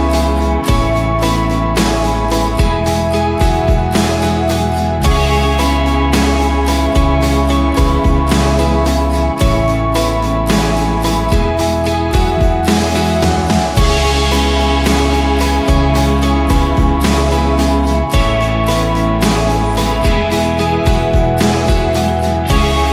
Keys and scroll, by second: 8.2-9.6 typing, 10.7-11.7 typing, 13.8 Return, 16.2 0, 16.3 Return, 17.2 ctrl+t, 18.5-21.2 typing.